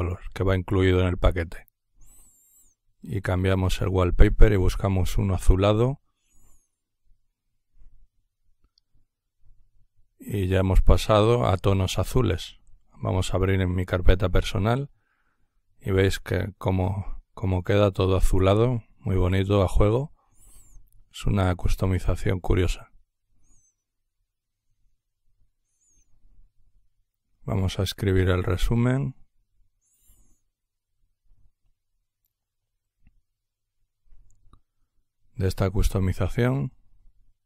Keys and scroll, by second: 15.6 typing, 19.8-20.2 typing, 37.3-37.4 typing.